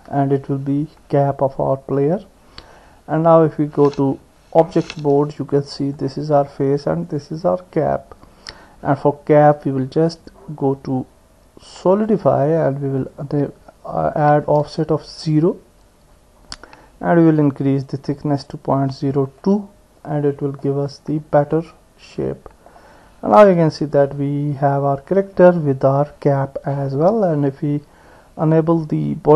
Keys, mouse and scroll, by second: 4.9 Tab, 5.8 click, 7.1 click, 10.2-12.2 drag, 13.2-15.1 drag, 19.4-20.7 middle drag, 21.4-22.7 middle drag, 23.6 KP_1.